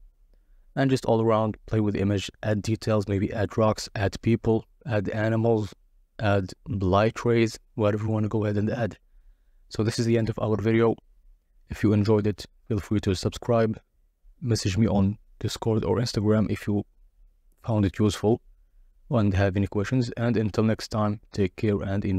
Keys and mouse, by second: 8.8-12.4 drag, 13.8 click, 14.6-16.9 drag, 18.4 click.